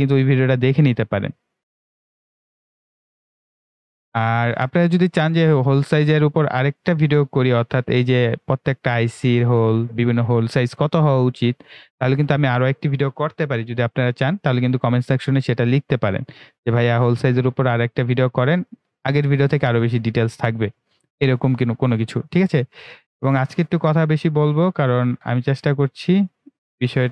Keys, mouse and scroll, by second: 0.4 click, 2.3 click, 3.1 Escape, 3.3 right click, 3.6-5.0 drag, 5.0 Delete, 6.5 click, 7.8 Delete, 13.9 ctrl+w, 17.2 click, 24.3-24.8 ctrl+scroll up 1, 26.8-27.1 scroll down 2.